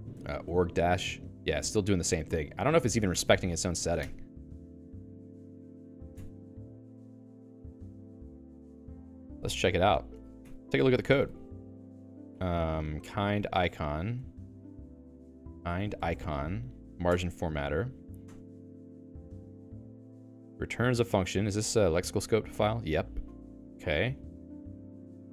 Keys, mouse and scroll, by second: 0.0-1.2 typing, 1.7 Down, 2.9 ctrl+g, 3.1 Escape, 3.7 ctrl+g, 4.1 Escape, 4.5-11.0 typing, 5.3 Escape, 5.9 ctrl+s, 12.8-17.0 typing, 14.7 ctrl+g, 18.3 Return, 19.3 j, 19.9 j, 20.9 j, 23.5 ctrl+o, 24.1 j, 24.9 k.